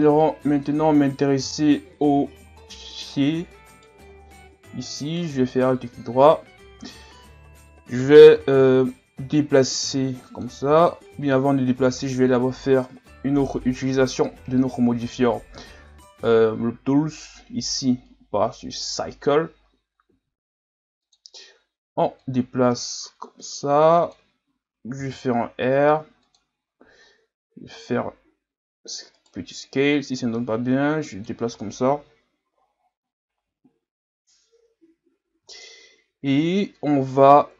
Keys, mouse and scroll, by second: 1.1-1.7 scroll down 6, 2.2-2.6 scroll up 1, 3.2-3.8 scroll up 1, 3.8 right click, 4.2 Tab, 5.0 alt+right click, 9.4-10.7 drag, 10.7 ctrl+z, 12.2 o, 13.5 o, 14.7 w, 20.1 s, 22.2-25.0 drag, 25.0 r, 27.6 s, 30.0-33.0 drag, 35.5-36.3 scroll down 1, 36.7-37.5 scroll down 1.